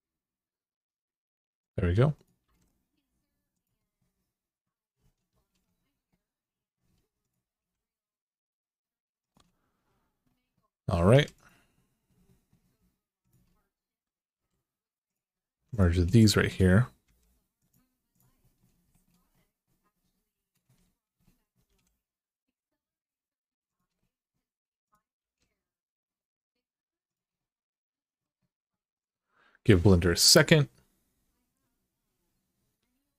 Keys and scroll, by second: 2.2 g, 7.3 g, 10.9 2, 14.1 e, 15.3 1, 16.8 m, 21.5 g, 25.0 g.